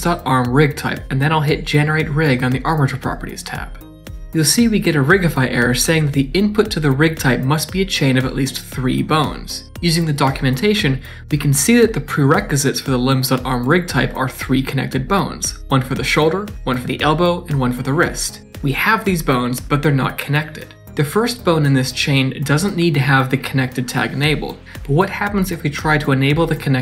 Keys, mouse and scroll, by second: 18.6 click, 18.7 click, 19.4 click, 20.8 right click, 21.1 d, 22.1 click, 26.7 right click.